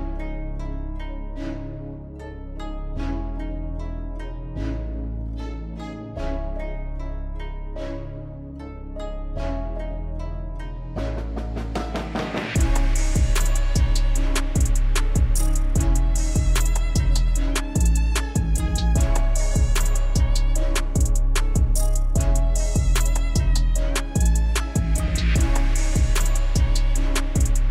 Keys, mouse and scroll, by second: 0.1 click, 2.7-4.3 drag, 6.8 click, 11.8 click, 16.3 click, 19.8 Down, 21.7 Down.